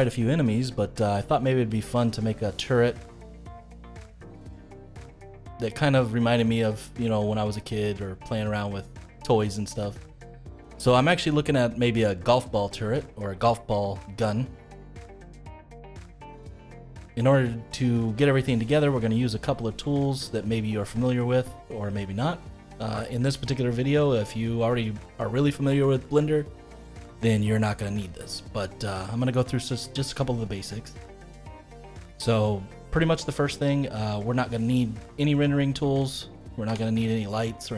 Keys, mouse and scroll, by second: 1.7-4.7 middle drag, 13.4-16.4 middle drag, 16.4-16.7 scroll down 1, 16.7-19.7 middle drag, 20.0-20.5 scroll down 1, 20.5 scroll up 4, 21.0-27.1 middle drag, 27.9-29.1 middle drag, 29.1-29.4 scroll down 1, 29.4-33.0 middle drag, 33.0-33.3 scroll down 1, 33.3-35.3 middle drag, 35.3 click, 36.6 Delete.